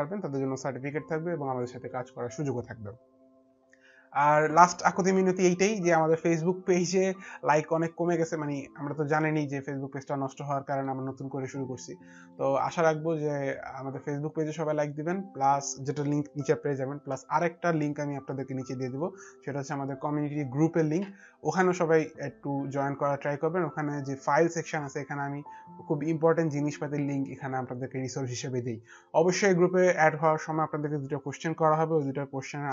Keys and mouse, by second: 8.0 click, 10.5 middle click, 10.5 click, 12.5 click, 12.5 middle click, 18.7 click, 24.2 click.